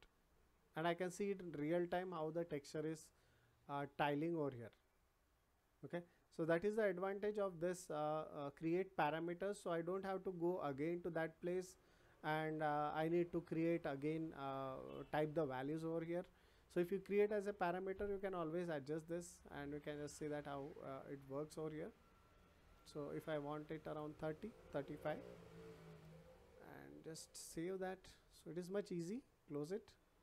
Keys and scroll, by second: 25.3 3, 25.8 Return.